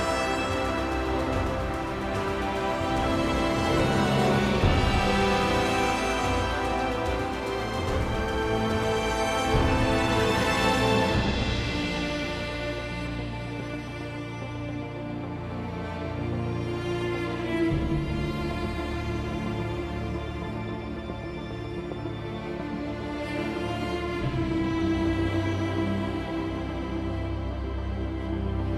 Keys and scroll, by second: 4.6-5.6 typing, 10.5-11.3 typing.